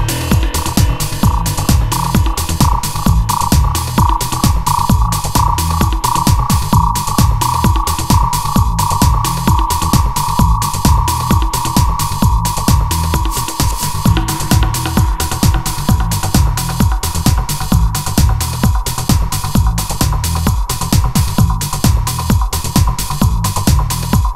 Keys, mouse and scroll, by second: 7.4 a, 7.8 b, 8.2 g, 10.5 shift+a, 20.3-21.9 drag, 21.9 a, 22.0 b, 22.9 g.